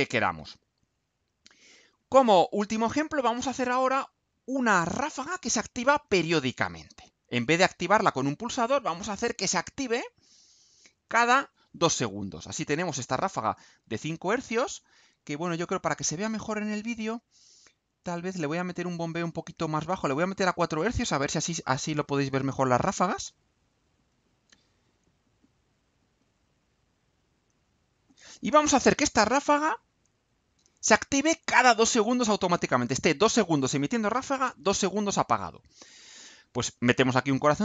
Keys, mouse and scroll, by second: 7.3 click, 10.0 Delete, 10.3 click, 11.2 Delete, 12.5-14.0 drag, 20.5 click, 21.4 click, 22.2 click, 22.9 Delete, 23.1-24.6 drag, 25.3-26.2 drag, 26.6-28.0 drag, 32.1 click, 36.4 click.